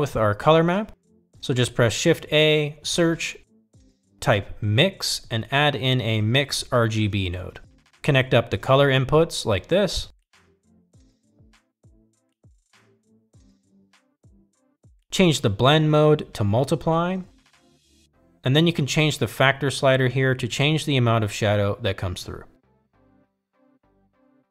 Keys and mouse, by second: 2.2 drag, 3.6 click, 4.0 shift+a, 10.7-11.5 drag, 12.4-13.4 drag, 13.9-14.7 drag, 17.3-18.2 drag, 21.5-24.5 drag.